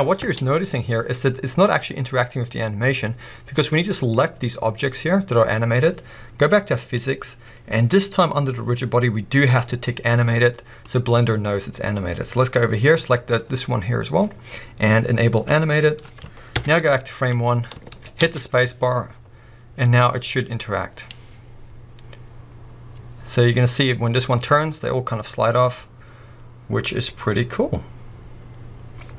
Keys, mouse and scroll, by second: 0.3 space, 0.6 scroll up 1, 3.9-13.4 drag, 13.4-14.0 scroll down 1, 15.5 click, 16.5 shift+Left, 17.2 scroll up 1, 17.9 alt+a, 18.2 space.